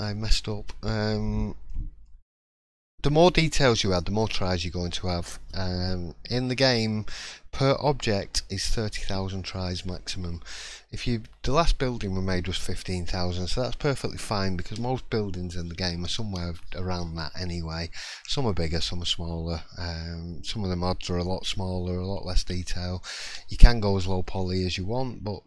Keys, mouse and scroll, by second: 0.0 scroll up 3, 0.5 middle click, 1.7-2.0 scroll down 1, 2.0 middle click, 2.5 scroll up 1, 3.9 shift+middle click, 9.2 middle click, 9.8-10.2 scroll down 2, 10.3 shift+middle click, 11.0-11.6 scroll up 1, 11.6-12.1 scroll down 1.